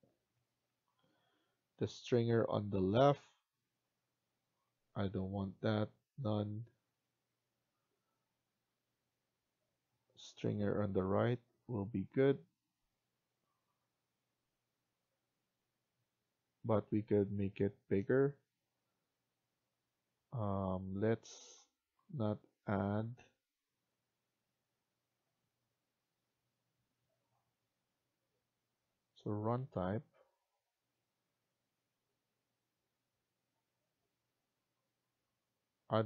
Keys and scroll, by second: 17.2 Escape.